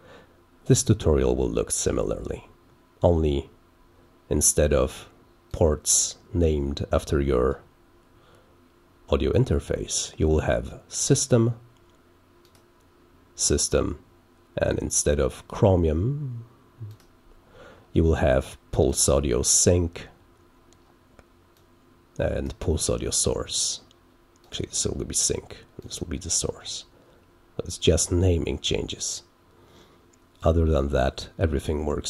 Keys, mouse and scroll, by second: 5.4 click, 12.4 click, 15.4 click, 16.8 click, 18.8 click, 21.5 click, 24.4 click, 25.7 click.